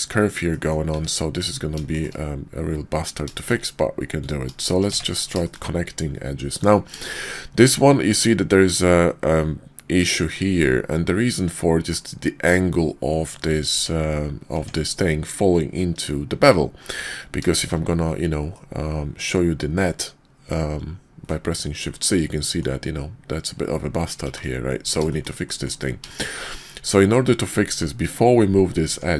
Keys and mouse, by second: 0.4 middle click, 1.9 shift+click, 3.3 shift+click, 4.8 1, 5.4 shift+click, 7.0 shift+click, 8.2-11.9 drag, 13.7 Tab, 14.5 Tab, 17.4 shift+z, 18.5-21.3 drag, 21.9 click, 24.2 shift+z, 25.1 shift+click, 25.4 click, 26.0 shift+click, 26.5 click, 26.7 middle click, 27.3 middle click, 28.8 Tab.